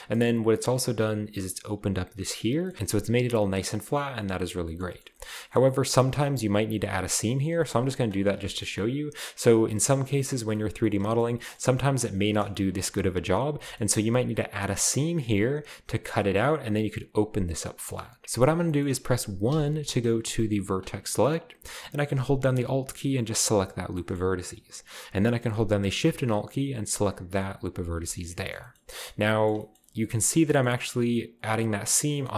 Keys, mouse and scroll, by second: 2.7-3.7 scroll down 1, 3.7-6.7 middle drag, 5.5-6.7 shift+scroll up 1, 7.6 shift+middle click, 8.5-10.5 shift+middle drag, 11.1-11.7 shift+scroll up 2, 12.0 scroll down 2, 12.7 a, 12.8 a, 12.9 scroll down 1, 13.0 a, 13.6-14.8 shift+middle drag, 13.7-14.8 shift+scroll up 1, 14.8-16.0 scroll up 1, 16.0-17.0 scroll down 1, 16.2 middle click, 18.0-19.2 shift+middle drag, 18.2-19.5 shift+scroll up 2, 19.5 1, 20.7 click, 21.3-22.1 scroll up 1, 23.2 alt+right click, 27.5 alt+shift+right click, 28.0-28.4 scroll down 1, 28.4 scroll up 1, 28.6 shift+scroll down 1, 28.9-29.8 scroll up 1, 30.4 middle click, 30.8-31.7 scroll up 1.